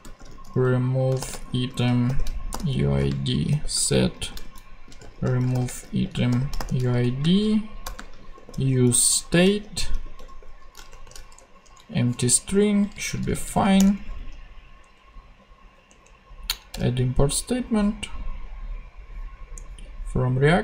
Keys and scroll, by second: 0.0-11.9 typing, 12.1 super+;, 12.6 Left, 13.6 alt+Left, 13.7 alt+Return, 14.8 alt+Down, 16.7 Return.